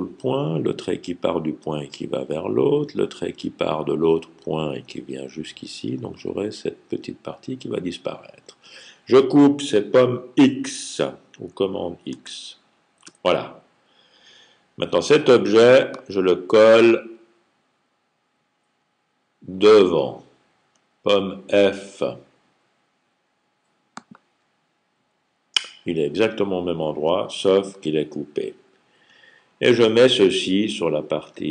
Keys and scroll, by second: 12.0 super+x.